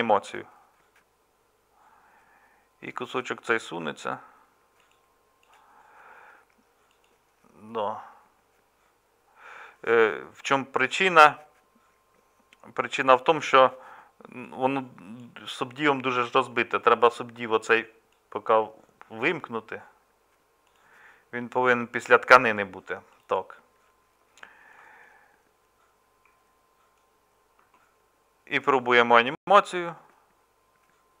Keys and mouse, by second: 24.8-31.2 middle drag.